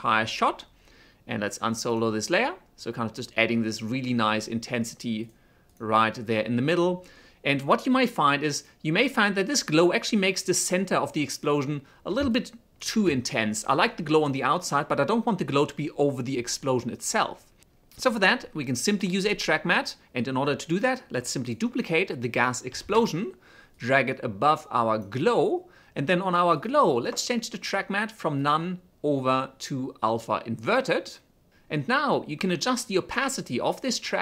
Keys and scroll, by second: 10.3 space, 22.4 ctrl+d, 33.2 t.